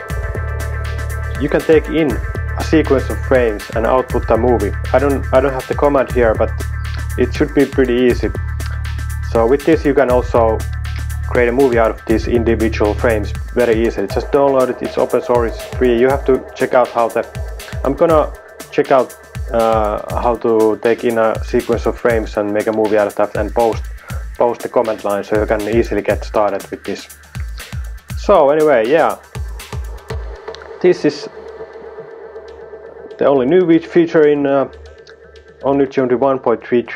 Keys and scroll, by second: 27.8 super+w.